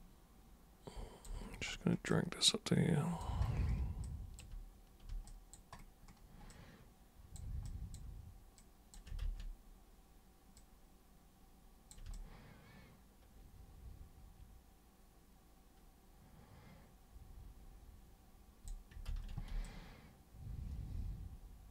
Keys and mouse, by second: 2.1-3.2 alt+super+drag, 4.0-4.4 alt+super+drag, 5.2 alt+super+click, 6.5-7.4 alt+super+drag, 7.7 super+drag, 8.6 super+click, 9.2 ctrl+super+z, 10.5-11.9 super+drag, 12.1-18.7 alt+super+drag, 19.1 ctrl+super+z, 19.6-21.7 alt+super+drag.